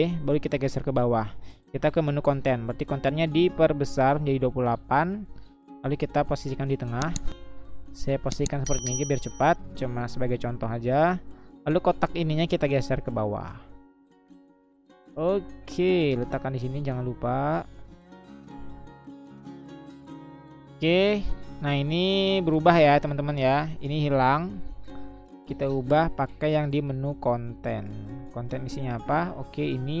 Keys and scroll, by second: 6.8 Up, 6.9 Up, 7.5 Up, 7.5-8.3 Left, 8.7 Left, 9.1 Right, 9.3 Right, 9.5 Down, 12.4-13.9 Down, 14.1-14.9 Down, 15.9 Up, 24.1 Delete, 28.0 Delete.